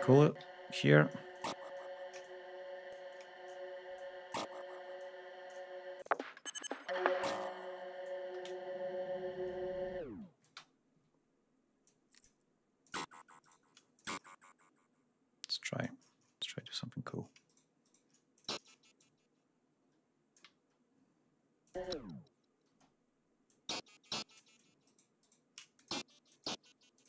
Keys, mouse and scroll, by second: 0.1 ctrl+space, 0.3 ctrl+d, 0.7 ctrl+click, 1.2 click, 2.1 shift+click, 3.8 click, 4.8 click, 5.8 click, 5.9 space, 8.2 g, 10.3 ctrl+space, 10.8 ctrl+d, 11.7 click, 12.7 click, 13.2 shift+right click, 13.8 shift+click, 15.3 click, 16.1 ctrl+scroll up 2, 17.3 shift+right click, 17.7 shift+right click, 18.2 shift+click, 18.8-20.4 drag, 21.4 click, 21.6 space, 22.5 space, 23.3 click, 24.6 alt+shift+right click, 25.6 shift+click, 26.1 shift+click, 26.9 space.